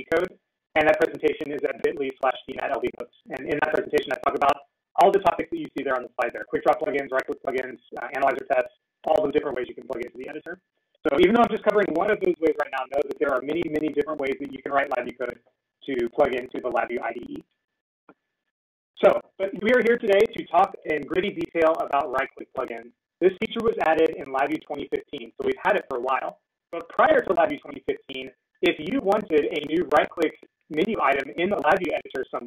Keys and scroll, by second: 23.6 ctrl+e.